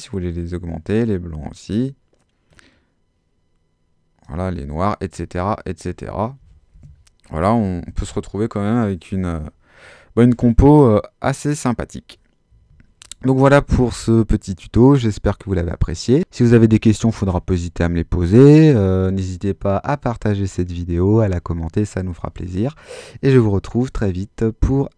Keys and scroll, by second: 6.4 super+z.